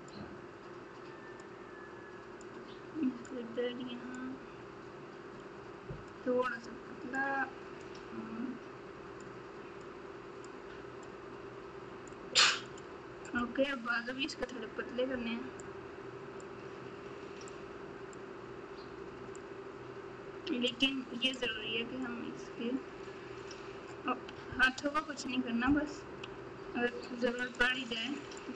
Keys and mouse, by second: 0.1-1.4 drag, 2.4 click, 4.2-6.1 drag, 7.1 click, 9.2 click, 10.4 click, 12.0 click, 15.6 click, 17.4 click, 19.3-20.7 drag, 22.0-23.5 drag, 24.7 ctrl+z, 26.3 f, 28.4-28.5 drag.